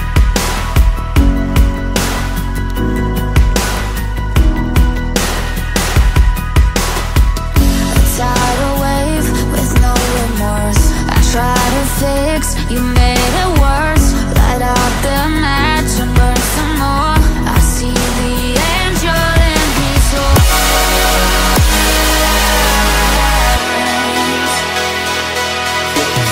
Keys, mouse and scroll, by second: 2.4 scroll down 2, 4.1 scroll down 2, 5.4 scroll down 2, 5.9-6.3 scroll up 7, 7.2 shift+middle click, 14.8-15.9 scroll down 1, 16.4-17.7 typing, 18.6 Return, 21.8-23.7 typing, 24.3 Return.